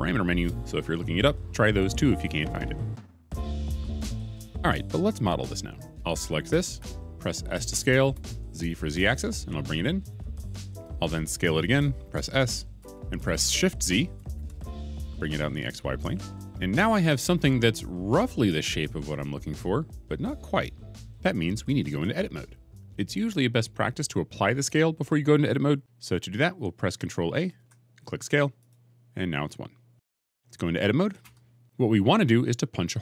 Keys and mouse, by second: 8.0 s, 10.0 z, 12.7 s, 14.2 shift+z, 25.8 ctrl+a, 27.4 ctrl+a, 31.1 Tab.